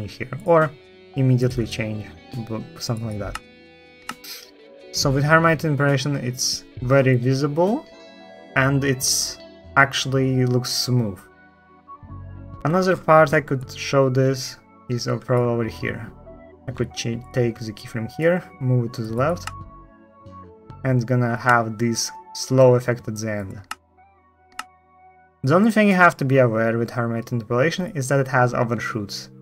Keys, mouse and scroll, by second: 3.0 space, 3.8 space, 18.3-18.7 ctrl+drag, 19.2 space, 21.2 space, 23.4 space, 24.3 space, 24.5 space.